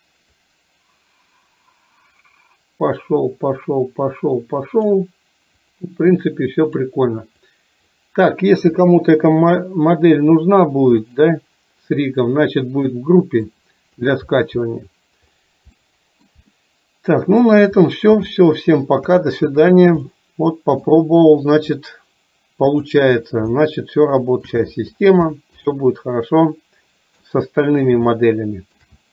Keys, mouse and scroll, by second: 0.4-5.0 drag, 5.8 click, 7.6 click, 11.0 click, 13.0 middle click, 15.8 middle click, 16.7 middle click, 18.3 shift+middle click, 20.2 middle click, 22.0 click, 23.6 shift+middle click, 27.3 middle click, 28.2 shift+middle click.